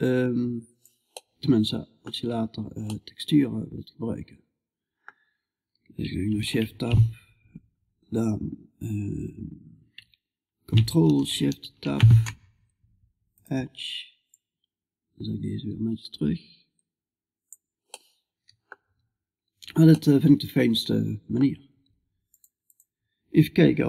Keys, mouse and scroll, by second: 0.6-9.6 middle drag, 11.1 ctrl+shift+Tab, 13.8-17.0 drag, 17.4 middle click, 19.4-20.4 middle drag, 22.3-23.6 drag.